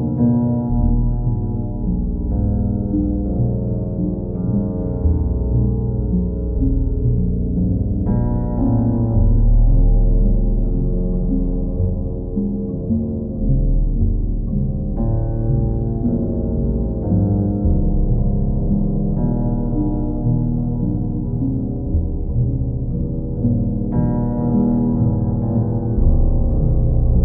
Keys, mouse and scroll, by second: 1.4 click, 4.7 click, 5.5-9.3 alt+drag, 10.0 click, 11.2 alt+click, 13.5 alt+click, 14.0 alt+click, 16.7 alt+click, 17.5 alt+click, 18.8 alt+click, 19.0 ctrl+click, 20.4 ctrl+click, 21.0 ctrl+click, 24.7 click, 25.4 alt+click, 25.9 ctrl+click.